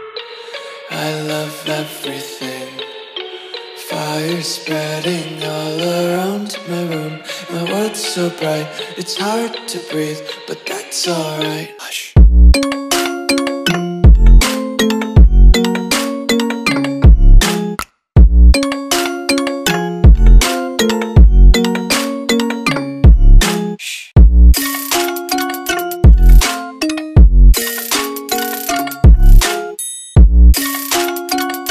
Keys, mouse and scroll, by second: 4.0 Return, 5.1 ctrl+click, 12.6 Delete, 14.2 ctrl+d, 16.6 click, 17.6-20.0 typing, 20.1 click, 25.7 ctrl+t, 25.9 click, 26.6 Return, 27.2 click, 27.6 ctrl+d, 28.1 click.